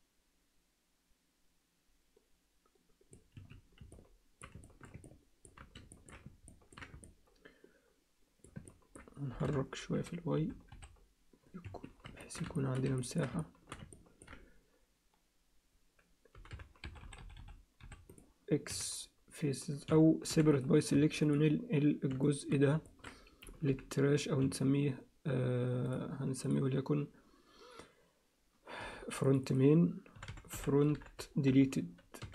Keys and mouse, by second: 3.9 alt+middle click, 4.6 alt+shift+middle click, 5.0 ctrl+alt+middle click, 5.9 alt+shift+middle click, 6.5 ctrl+alt+middle click, 7.0-8.5 alt+middle drag, 8.7 ctrl+alt+middle click, 9.3 g, 12.2 ctrl+alt+middle click, 12.5 alt+shift+middle click, 13.0 ctrl+alt+middle click, 13.4 alt+shift+middle click, 13.9 ctrl+alt+middle click, 16.3 g, 18.7 x, 20.3 p, 21.0 Tab, 22.2 alt+shift+middle click, 22.9 ctrl+middle click, 23.7 m, 25.9 click, 26.4-32.3 drag.